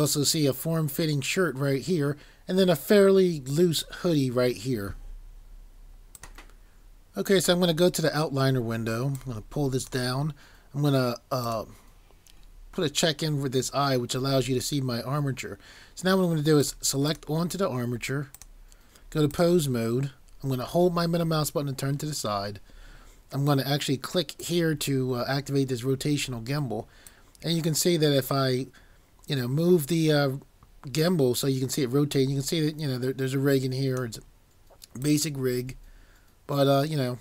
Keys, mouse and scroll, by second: 20.9 middle click, 24.4 click.